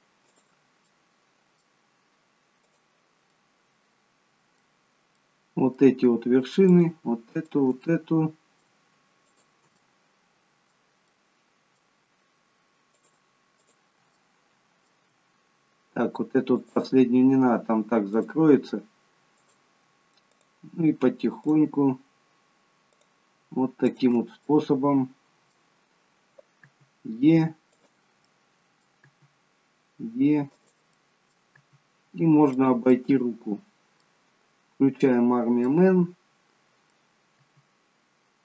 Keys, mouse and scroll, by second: 0.2 click, 0.8 middle click, 2.6 click, 3.2 middle click, 5.2 middle click, 6.6 shift+click, 7.6 shift+click, 7.7 middle click, 9.1 shift+click, 9.8 middle click, 10.9 middle click, 12.9 shift+click, 14.3 shift+click, 14.3 middle click, 16.4-24.4 shift+click, 24.4 middle click, 26.6 e, 28.2 middle click, 29.0 e, 30.8 middle click, 31.6 e, 32.9 middle click, 34.9 click, 35.6 middle click, 37.4 e.